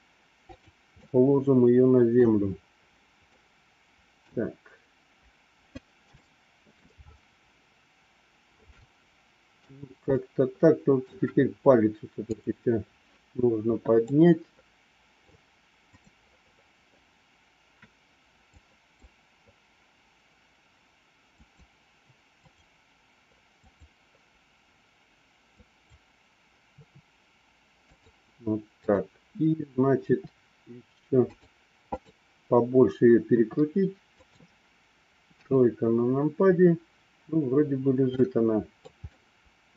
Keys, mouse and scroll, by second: 1.1-2.2 middle drag, 3.3 middle click, 6.2 shift+middle click, 8.7 middle click, 10.1 middle click, 12.2 click, 14.1 scroll up 2, 14.3 middle click, 15.8 click, 18.7 click, 21.3-22.7 drag, 23.7 click, 25.7 click, 26.8 r, 29.9 r, 31.9 click, 33.2 r, 35.3 KP_3, 38.0 middle click, 39.0-39.7 middle drag.